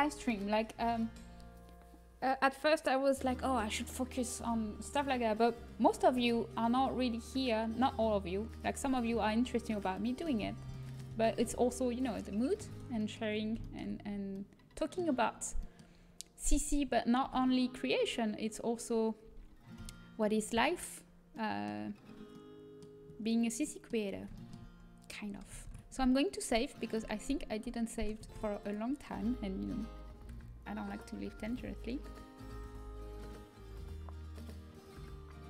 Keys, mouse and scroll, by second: 7.4-10.4 drag, 10.4 middle click, 17.2 a, 19.7 KP_1, 21.4-25.4 middle drag, 25.6 ctrl+s.